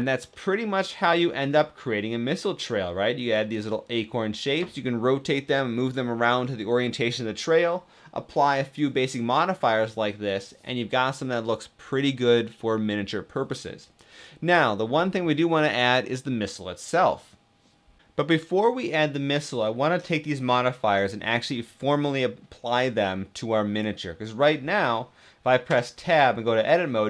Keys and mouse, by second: 0.0-6.8 middle drag, 19.3 middle click, 25.6 Tab.